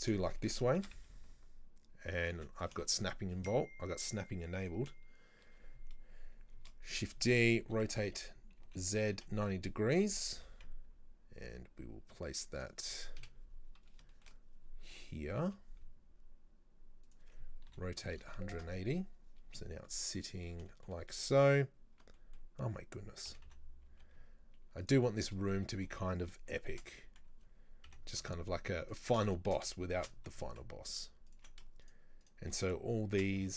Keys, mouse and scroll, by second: 0.0-0.3 scroll down 4, 0.3-0.8 shift+middle drag, 0.8 shift+d, 2.6 scroll down 3, 2.9-4.6 shift+middle drag, 4.6 right click, 6.6 shift+d, 7.7 r, 10.4 g, 13.2 KP_7, 13.9-14.2 scroll up 2, 14.2-15.5 shift+middle drag, 15.5 g, 17.7 r, 19.9-23.3 middle drag, 23.3 g, 25.2-25.5 scroll down 3, 25.5-26.8 shift+middle drag, 26.8 shift+d, 29.3 shift+right click, 30.0 shift+d, 31.9 shift+right click, 32.3 shift+right click, 33.2 shift+d.